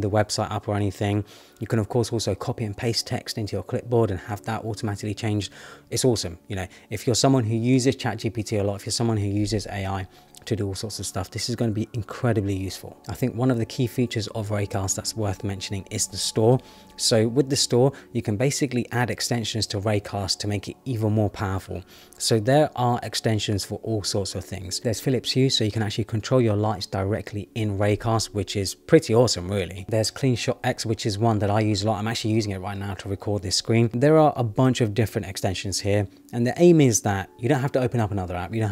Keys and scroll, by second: 16.9 Return.